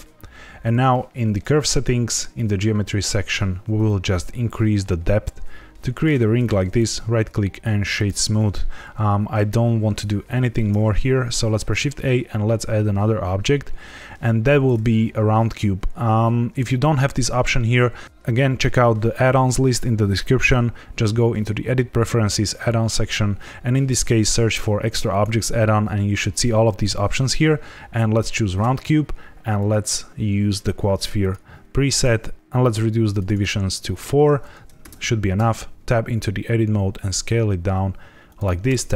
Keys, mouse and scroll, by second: 1.2 click, 2.3 click, 3.8 shift+click, 6.6 right click, 11.4 shift+a, 29.5 click, 33.0 click, 33.2 click, 33.3 click, 33.8 click, 34.8 Tab, 35.3 s, 38.2 click, 38.6 Tab, 38.9 g.